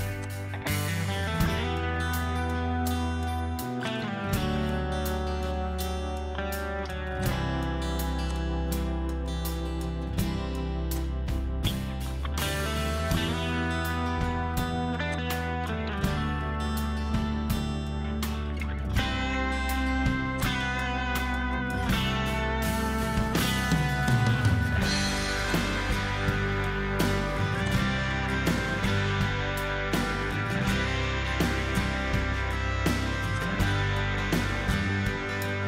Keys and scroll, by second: 1.0-1.6 typing, 3.4 m, 4.6-6.8 typing, 10.2 p, 12.2 typing, 13.6 2, 14.3 Return, 16.5 ctrl+c, 16.9 Escape, 17.0 Escape, 19.0 p, 21.2-22.3 typing, 23.1 Return, 24.8 ctrl+z, 26.0-27.3 typing, 29.1-30.4 typing, 31.4 typing, 32.5-33.2 typing, 34.7-35.6 typing.